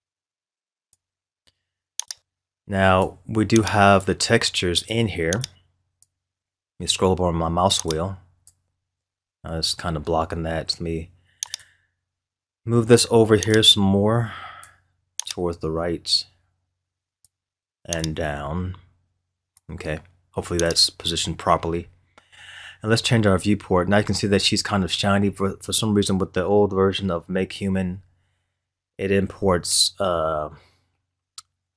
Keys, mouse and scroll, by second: 0.0-6.4 drag, 6.4-7.8 scroll up 4, 7.8 click, 8.7 scroll up 2, 11.5-23.7 drag.